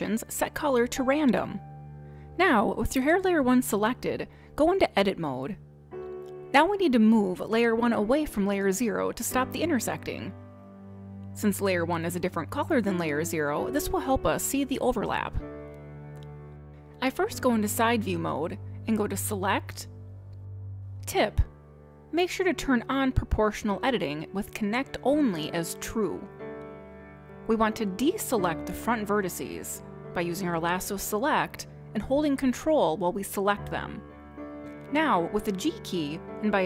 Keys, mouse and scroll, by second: 0.0 click, 4.5 click, 6.3 click, 9.1 middle click, 12.7 middle click, 14.3 scroll up 5, 14.7 middle click, 16.2-16.7 scroll down 4, 16.7 scroll up 1, 16.8 middle click, 18.2 click, 18.7 scroll down 2, 20.4 click, 24.7 click, 25.2 click, 25.4 click, 32.0 click, 34.5 ctrl+click, 36.5 middle click.